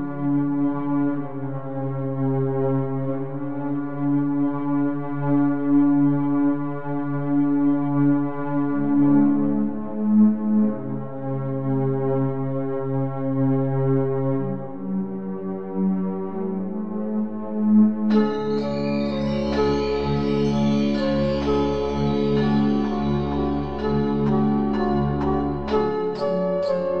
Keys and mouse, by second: 1.5-4.2 drag, 4.2 KP_3, 5.2-8.9 middle drag, 8.9-11.1 drag, 12.9-14.1 right drag, 14.1-16.8 middle drag, 16.8-19.2 drag, 22.6-25.6 right drag, 24.3 click.